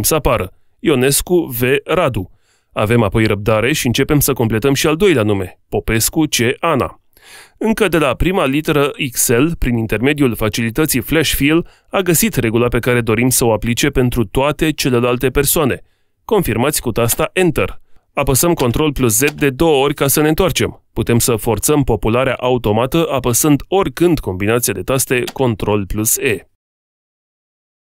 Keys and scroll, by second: 24.1 ctrl+e.